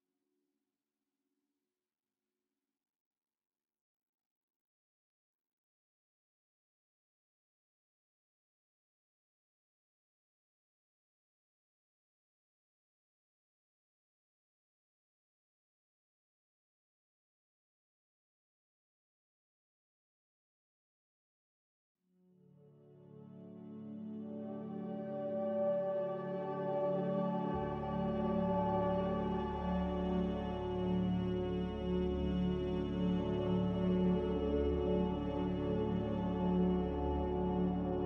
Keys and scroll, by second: 3.6 ctrl+z, 13.2 b, 15.0 Delete, 17.4 Delete, 18.3 n, 25.8 a, 30.8 b, 32.2 Delete, 34.3 n, 35.8 b.